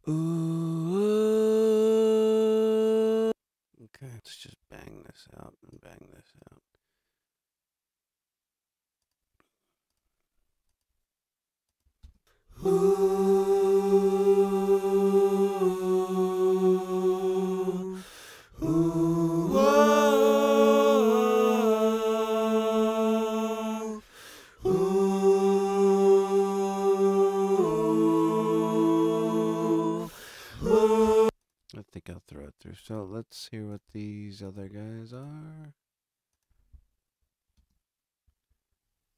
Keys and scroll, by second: 31.0 space, 37.5 space.